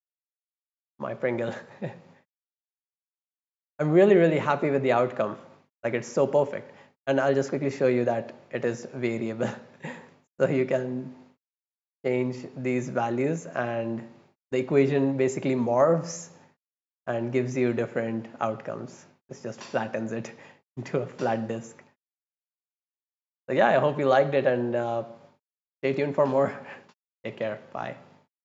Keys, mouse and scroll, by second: 2.6 middle click, 2.9 right click, 3.8 scroll down 1, 4.1 middle click, 5.1-6.1 right drag, 6.5 middle drag, 6.8 middle click, 6.8-7.6 scroll up 3, 7.1 middle click, 7.4 middle click, 8.0-10.0 drag, 10.5-14.4 drag, 15.6 middle click, 15.9 middle click, 16.3 right click, 16.6 middle click, 16.9 middle click, 17.8-22.7 drag, 23.1 click.